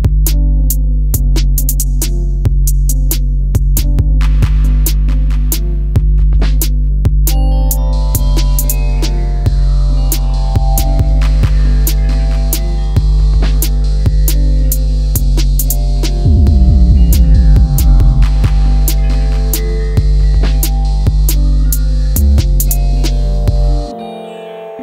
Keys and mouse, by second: 2.0 KP_7, 2.7 click, 4.2 click, 9.5 click, 11.2 middle click, 12.5 middle click, 13.8 ctrl+r, 15.0 click, 15.2 middle click, 16.5 ctrl+r, 17.7 click, 18.1-19.1 middle drag, 22.8 click.